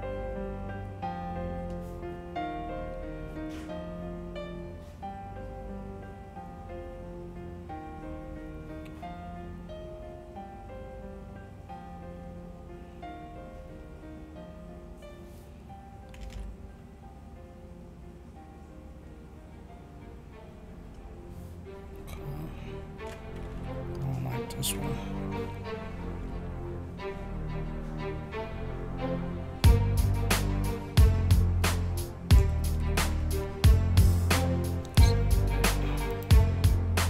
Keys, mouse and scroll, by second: 5.0-13.7 drag, 16.3 ctrl+z, 18.0-20.9 drag, 23.5 v, 24.0 click, 27.9-30.3 drag, 36.1 click.